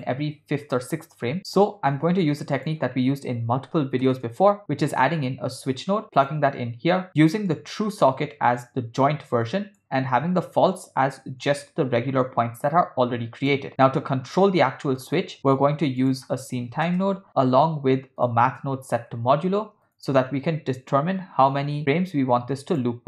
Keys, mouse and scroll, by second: 1.4-1.7 drag, 1.9 shift+a, 7.5 click, 7.7-9.1 drag, 9.5 click, 11.7-13.6 drag, 14.9 middle click, 15.4 shift+a, 19.2 shift+a.